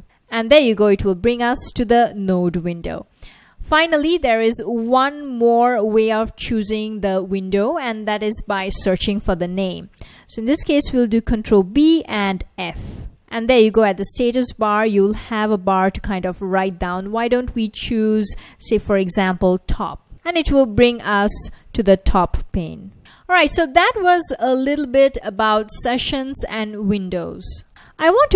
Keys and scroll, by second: 11.6 ctrl+b, 12.5 f, 14.9 F1, 18.9-19.9 typing, 20.1 Return.